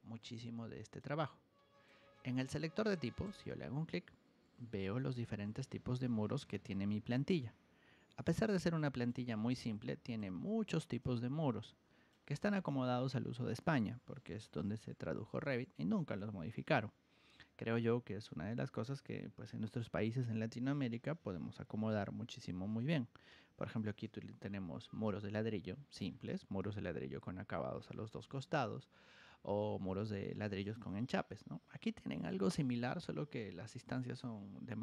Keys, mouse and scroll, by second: 0.1 click, 1.2 click, 1.9 Escape, 3.2 click, 5.2-9.0 drag, 9.3 ctrl+1, 10.0 click, 10.9-12.0 ctrl+drag.